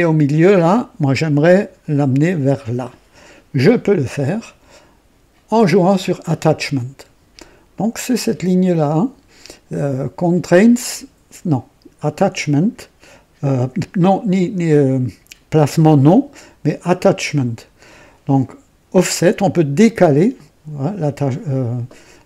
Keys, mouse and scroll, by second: 0.6-1.2 drag, 1.5 click.